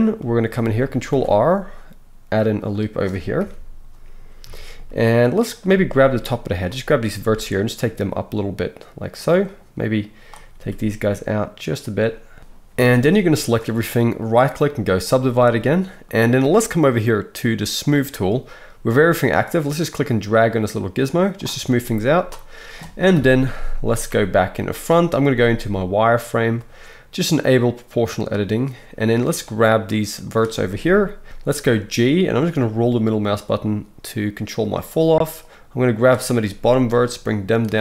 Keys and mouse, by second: 1.1 ctrl+r, 3.4 KP_1, 5.1-9.2 drag, 5.7 z, 7.2 g, 9.2 middle click, 9.5-11.7 drag, 10.5 g, 11.7 middle click, 12.0 click, 12.4-14.2 middle drag, 12.7 a, 14.2-24.5 right drag, 17.9-24.5 drag, 21.7 z, 23.1 KP_1, 24.5-27.8 middle drag, 25.3 z, 27.8-29.0 drag, 29.0-34.5 middle drag, 31.3 g, 34.8 click, 36.4 g, 37.7 click.